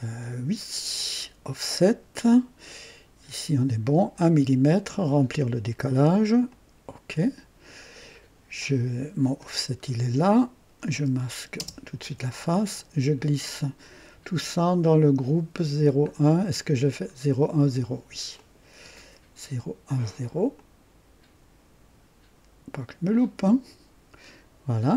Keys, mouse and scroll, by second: 0.9 click, 4.9 click, 6.4 click, 9.2 click, 9.6 scroll down 1, 10.9 click, 11.6 space, 12.7 click, 16.0 ctrl+scroll up 2, 17.2 ctrl+scroll down 2, 18.3 ctrl+click, 20.5-23.2 drag.